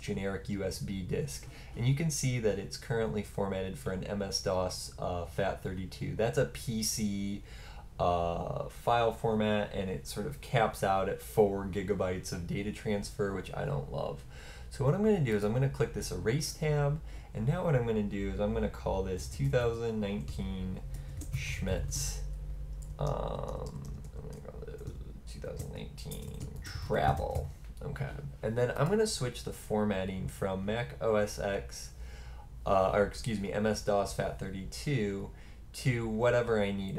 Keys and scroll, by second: 18.9-27.8 typing.